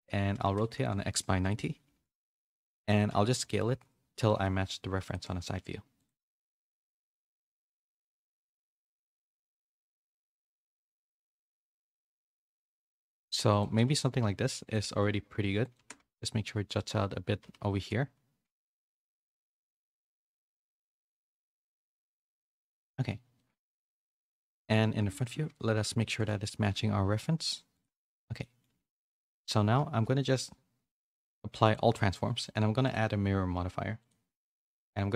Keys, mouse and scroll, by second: 3.4 KP_3, 4.2 s, 5.2 s, 7.1 g, 8.2 s, 8.8 g, 10.4 middle click, 10.6 z, 11.1 s, 13.6 g, 14.7 s, 15.7 g, 17.4 s, 19.8 ctrl+z, 20.3 s, 21.1 g, 22.9 z, 23.3 middle click, 25.1 KP_1, 25.7 z, 26.2 middle click, 26.4 g, 28.5 middle click, 28.7 z, 29.1 shift+middle click, 30.0 ctrl+a, 32.9-34.0 drag.